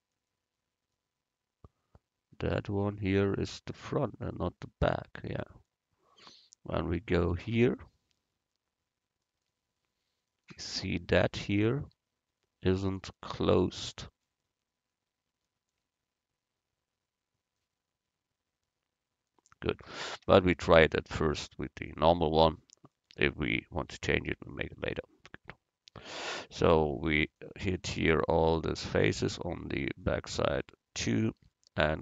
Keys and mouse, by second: 7.2-8.9 drag, 7.6 middle click, 7.6 right click, 8.9 middle click, 10.3-12.5 right drag, 13.0 right click, 19.7 middle click, 20.5 Tab, 21.3 click, 21.9 click, 23.9 Tab, 27.4-29.5 right drag, 30.0-32.0 middle drag.